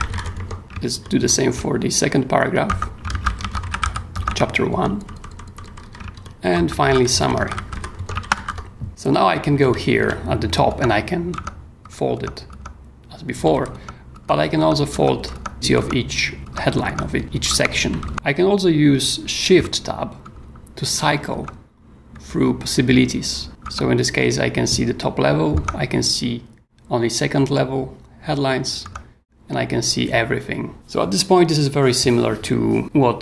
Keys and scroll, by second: 0.0-0.9 typing, 2.7-9.4 typing, 10.7 Tab, 13.3-18.6 typing, 13.7 Tab, 14.6 Tab, 15.3 Tab, 15.8 Tab, 20.2 shift+Tab, 23.6 shift+Tab, 25.5 shift+Tab, 28.8 shift+Tab.